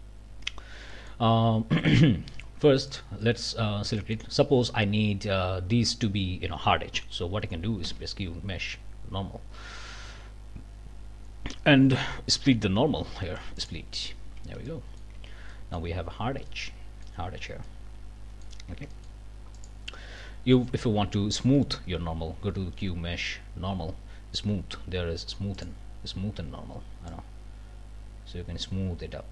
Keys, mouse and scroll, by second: 0.0 Up, 0.5 scroll up 2, 0.9 middle click, 2.2 3, 2.9 middle click, 3.2 middle click, 4.0 middle click, 7.8 q, 13.6 click, 14.4 alt+a, 14.7 alt+click, 15.2 alt+Tab, 15.5 alt+click, 16.5 click, 17.6-18.6 drag, 18.7 Tab, 18.9 click, 19.5 click, 20.2 click, 21.5 q, 25.6 click, 27.1-29.3 drag.